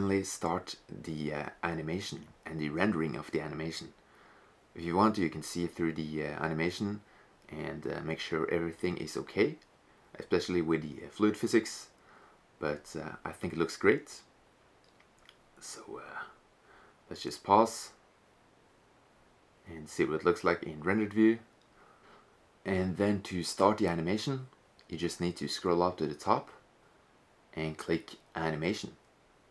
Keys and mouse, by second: 1.6 shift+z, 4.7 click, 15.6-16.6 drag, 18.3 shift+z, 22.1 shift+z, 25.8-29.5 middle drag.